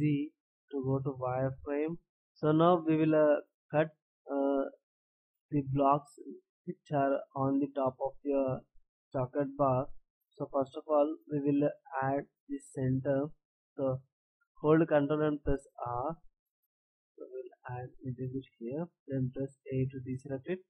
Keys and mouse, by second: 2.2-15.5 drag, 19.2 a.